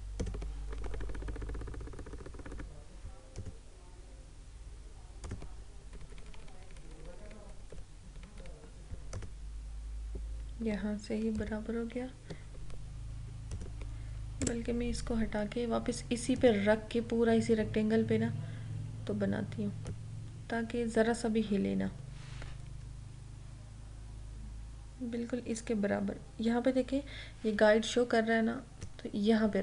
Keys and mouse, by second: 0.7 Right, 3.4 click, 5.9 Left, 7.7 Down, 8.1 Left, 9.1 click, 11.4 ctrl+-, 13.5 click, 16.5 click, 20.0-22.8 drag, 22.8 Down.